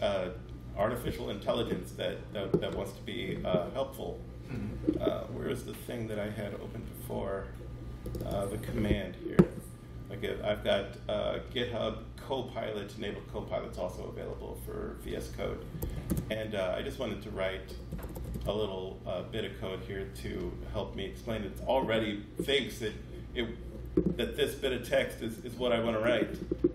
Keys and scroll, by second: 0.1 super+1, 15.6 shift+3, 15.9 space, 17.5 BackSpace, 17.8 shift+3.